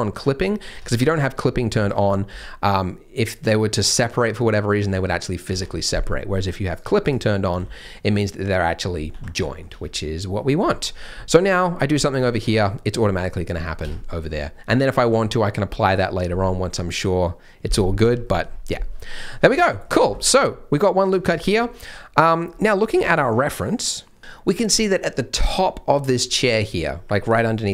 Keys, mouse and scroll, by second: 0.7 Tab, 1.0 a, 1.4 scroll up 1, 1.7 z, 2.2 g, 6.6 click, 7.5 g, 9.4 middle click, 9.6 Tab, 10.0 middle click, 10.3 scroll down 1, 10.7 middle click, 10.8 Tab, 11.1-11.5 scroll up 1, 11.5 click, 11.9 g, 12.6 middle click, 13.6 scroll down 1, 13.8 Tab, 13.9 middle click, 18.0 Tab, 18.2 middle click, 19.9 scroll down 1, 20.1 shift+middle click, 21.0 shift+middle click, 21.0 scroll down 1, 21.3 shift+middle click.